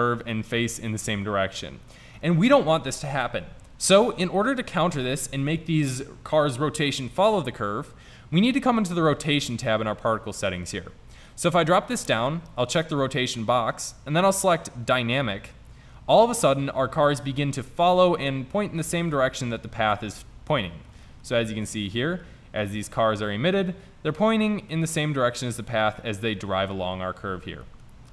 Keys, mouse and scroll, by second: 4.4 middle click, 10.6 middle click, 11.3-11.8 drag, 15.6 click, 17.3 middle click, 19.0 middle click.